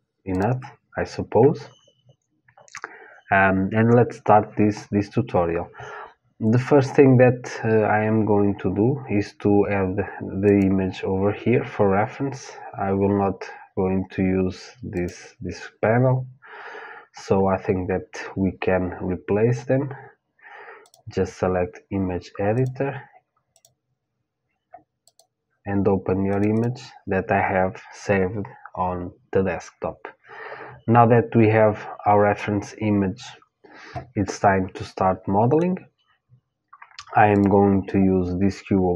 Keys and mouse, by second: 10.1-12.6 drag, 14.5-20.1 drag, 22.1-26.2 drag, 33.9-36.1 middle drag, 36.9-38.9 drag.